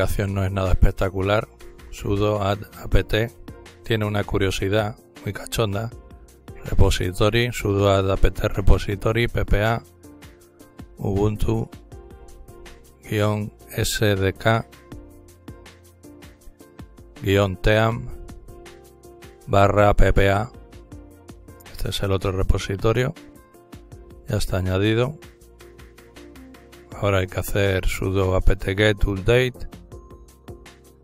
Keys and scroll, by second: 0.5-2.9 typing, 4.4-6.3 typing, 8.0-10.4 typing, 12.2-14.5 typing, 16.2-17.3 typing, 18.4-21.6 typing, 23.7-25.0 typing, 28.1-31.0 typing.